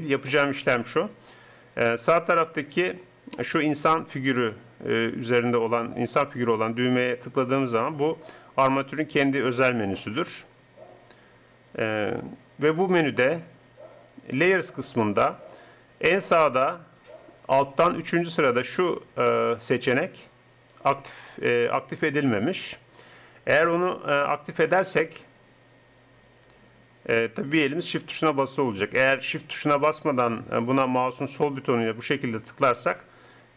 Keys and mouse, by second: 1.5-4.4 drag.